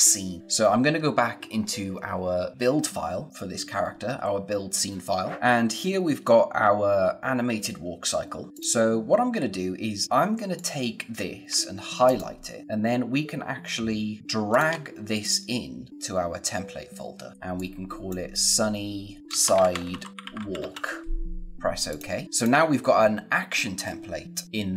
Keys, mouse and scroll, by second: 5.5 click, 10.5 click, 12.0 shift+click, 14.2 shift+Num_Lock, 14.5 shift+click, 17.5 click, 19.0-21.0 typing, 21.8 click.